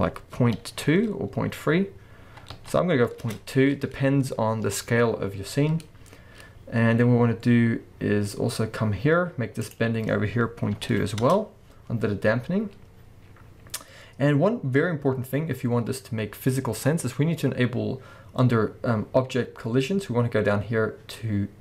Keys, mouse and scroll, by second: 3.3 Return, 6.2-8.9 scroll down 1, 11.3 2, 13.4-14.2 scroll down 1.